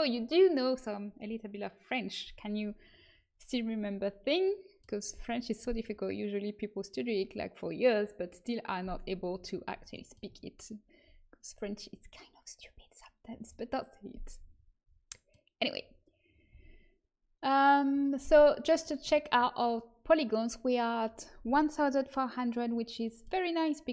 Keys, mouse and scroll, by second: 3.7-9.0 middle drag, 9.5-14.0 middle drag, 14.4-16.4 middle drag, 16.4 a, 23.0-23.9 middle drag.